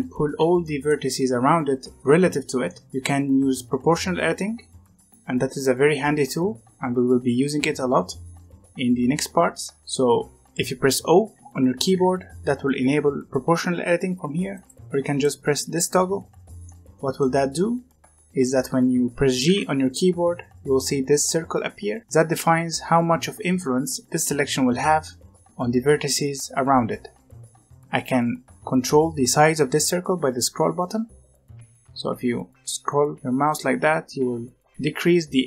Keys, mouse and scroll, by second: 0.5-4.5 middle drag, 4.9-7.9 middle drag, 8.0 middle click, 8.5-9.4 scroll down 2, 9.4-9.8 scroll up 1, 9.8 middle click, 11.8 o, 14.4 click, 15.0 click, 16.5-19.4 middle drag, 19.4 g.